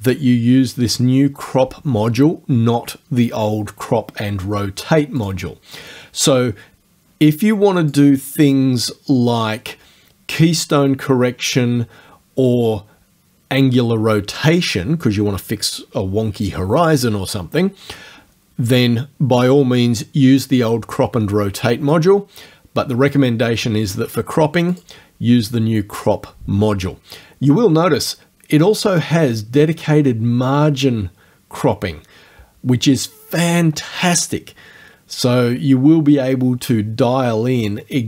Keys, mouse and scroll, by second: 5.2 click, 7.9 click, 24.8 click.